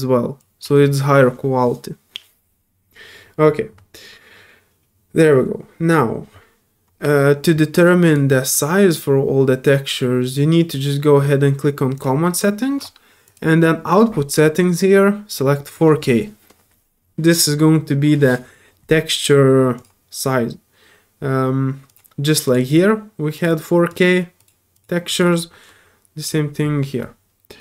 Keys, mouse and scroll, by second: 8.0 click, 11.9 click, 13.2 click, 15.6 click, 19.7 click, 22.4 click, 22.6 click, 23.3 click, 23.9 click, 24.4 click, 24.7 click, 25.1 click, 26.2 click.